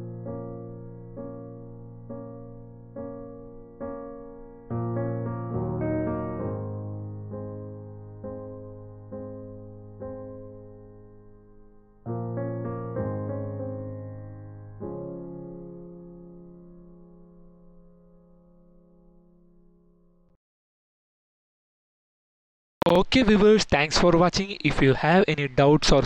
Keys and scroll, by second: 4.7 Tab.